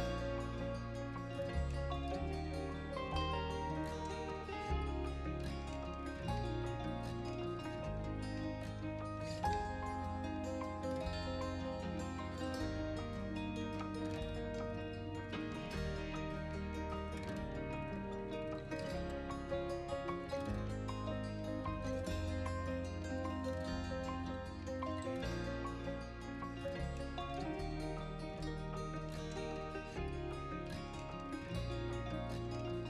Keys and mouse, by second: 5.7-7.2 drag, 7.2 Tab, 8.6-10.6 drag, 11.3 r, 11.5 x, 13.4 click, 14.8 click, 16.0 shift+s, 17.2 KP_1, 18.9 Tab, 19.9 KP_3, 23.7-24.7 drag, 25.6 g, 27.8 Escape, 28.2 g, 28.8 shift+x, 32.6 click.